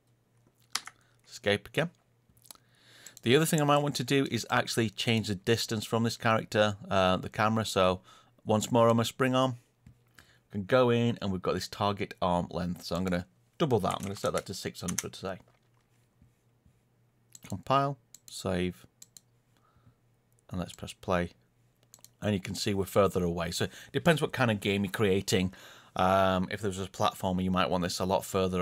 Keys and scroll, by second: 0.7 Escape, 3.1 Page_Down.